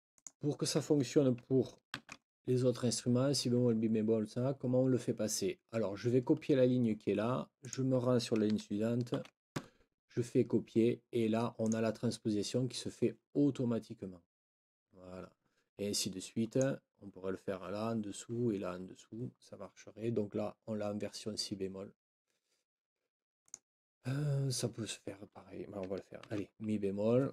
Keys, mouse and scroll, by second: 0.1 shift+click, 1.9 ctrl+c, 7.6 click, 9.1 ctrl+v, 11.6 click, 16.5 click, 23.4 click, 26.2 ctrl+v.